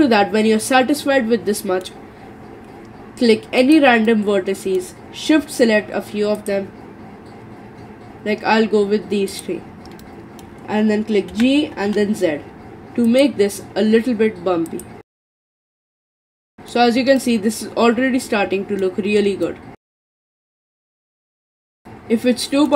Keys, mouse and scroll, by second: 1.2-1.6 scroll up 2, 1.6 middle click, 2.0 scroll up 1, 2.0-3.6 scroll down 4, 3.6 click, 4.1-6.4 middle drag, 6.4 shift+click, 9.3 shift+click, 10.0-11.3 middle drag, 11.3 g, 14.7 click, 15.3 g, 16.1-20.0 middle drag, 20.0 scroll down 3, 20.3-22.7 middle drag.